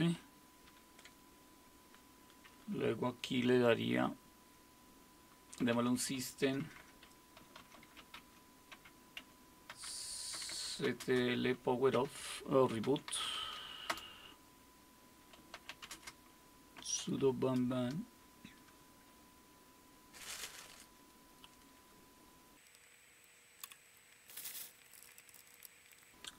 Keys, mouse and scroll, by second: 0.7 super+w, 5.4-14.1 typing, 15.1-17.8 typing, 24.7-26.1 typing.